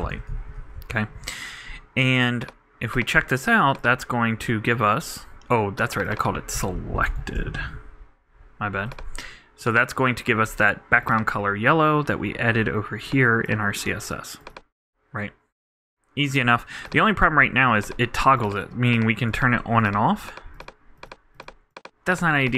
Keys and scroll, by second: 0.3 super+t, 0.3 super+Right, 0.8 super+;.